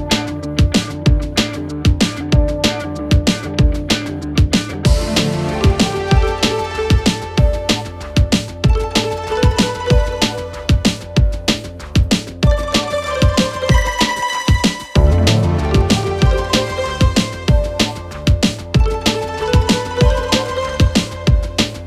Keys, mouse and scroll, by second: 4.8-5.4 click, 5.0 space, 5.1 click, 5.4 space, 5.7 click, 5.8 space, 5.9 click, 6.1 space, 6.3 click, 7.2-13.6 typing, 7.4 click, 7.8 click, 8.4-8.7 click, 8.9 click, 9.4-9.8 click, 10.2-10.9 click, 10.6 click, 11.2 click, 11.4-11.7 click, 12.0-12.4 click, 12.4 click, 13.0 click, 14.2-14.8 click, 14.8 space, 15.0-15.8 click, 16.4 space, 16.5 click, 16.8 space, 17.1-17.4 click, 17.9 space, 18.0 click, 18.2 space, 18.7-19.4 drag.